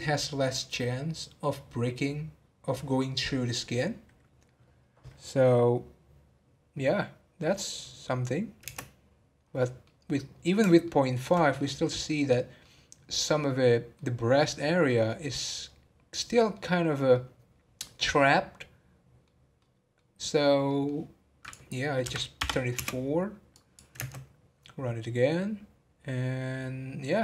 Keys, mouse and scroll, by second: 8.1 middle click, 8.9 space, 9.4-9.8 scroll up 2, 9.8-19.3 middle drag, 19.3 scroll down 1, 19.6-21.4 middle drag, 21.4-24.0 drag, 24.0 space.